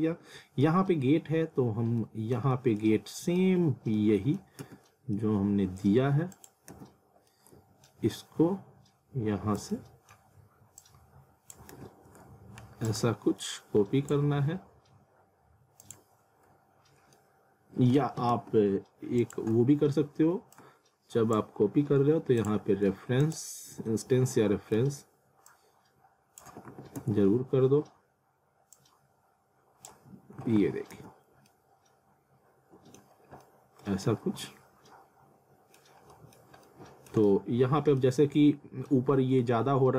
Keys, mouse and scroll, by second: 0.0 alt+middle click, 0.9-1.2 scroll down 1, 1.7 scroll up 1, 2.0 middle click, 3.0 scroll down 1, 3.2 middle click, 4.6 z, 5.2 alt+middle click, 6.3 click, 6.7 z, 7.3 alt+middle click, 9.7 alt+middle click, 10.8 click, 11.7 ctrl+z, 12.9 shift+click, 16.9 scroll down 1, 17.1 alt+middle click, 19.2 click, 20.5 shift+click, 23.7 z, 24.3 alt+middle click, 25.5 click, 26.5 w, 27.0 z, 28.7 click, 30.4 w, 30.9 z, 31.5 alt+middle click, 33.2 scroll down 1, 33.4 alt+middle click, 34.2 scroll up 1, 34.5 alt+middle click, 37.3 alt+middle click, 38.2 scroll up 1, 38.3 alt+middle click.